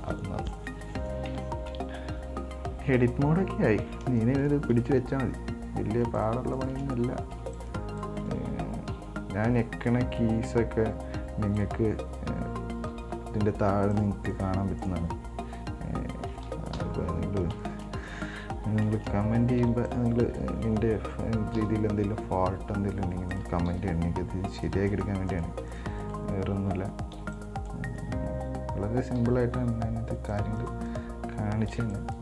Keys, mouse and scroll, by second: 0.1 scroll down 5, 1.0 Tab, 1.5 Tab, 1.8 Tab, 3.2-3.6 scroll up 3, 3.6-4.1 scroll down 2, 4.1-4.4 scroll up 3, 4.4-5.4 shift+middle drag, 5.4 scroll up 2, 6.3 shift+right click, 6.8 shift+right click, 7.5 b, 9.2 r, 13.0 g, 14.5 right click, 15.0 right click, 17.0 KP_7, 17.8 shift+middle click, 18.3 right click, 19.8 b, 21.8 r, 23.9 g, 25.1 right drag, 25.5 right click, 25.9 right click, 26.2 right click, 27.3 b, 29.3 g, 30.8 right click, 31.1 right click, 32.0 b.